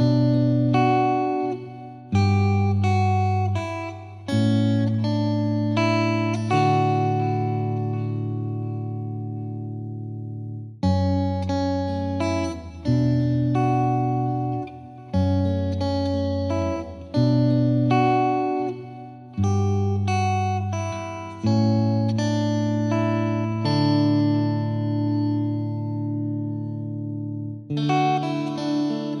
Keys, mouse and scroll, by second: 4.1 click, 5.0 scroll down 3, 5.2 click, 5.8-6.2 scroll down 1, 6.2-9.9 drag, 9.9 middle drag, 10.0 scroll down 1, 10.1 shift+middle click, 10.3 space, 10.7 space, 12.2 click, 12.6-13.2 scroll down 2, 13.2 click, 13.3 middle drag, 13.7 click, 14.0-14.4 scroll down 3, 21.3 scroll down 1, 23.2 scroll up 1, 23.7-24.2 scroll down 2, 25.0-26.2 drag, 26.2-26.5 scroll up 1, 26.5 space, 27.1 space, 27.6 click, 27.8-29.2 shift+middle drag.